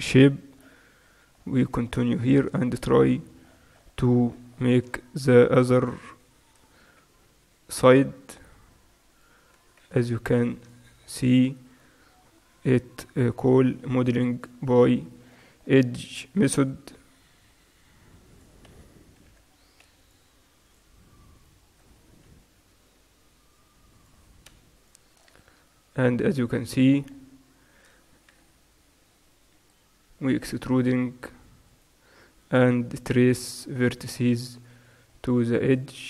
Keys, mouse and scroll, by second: 0.4 right click, 1.3-8.9 middle drag, 7.1 e, 10.5 ctrl+r, 11.1 middle click, 11.8-12.9 drag, 12.9 right click, 12.9 g, 14.9 right click, 15.8-17.0 middle drag, 17.0 e, 19.4 x, 21.5-24.0 right drag, 22.9 g, 24.9-26.5 right drag, 26.5-28.4 middle drag, 28.4 e, 31.3 middle click, 31.7-34.0 right drag, 32.8 g, 34.8-36.0 right drag.